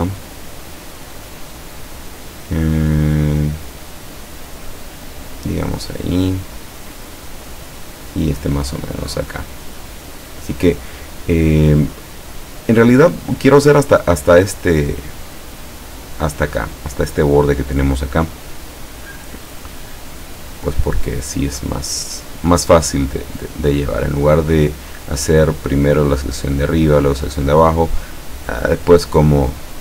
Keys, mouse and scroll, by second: 6.1-8.7 drag, 20.5 click, 22.0 click, 23.1-24.9 drag.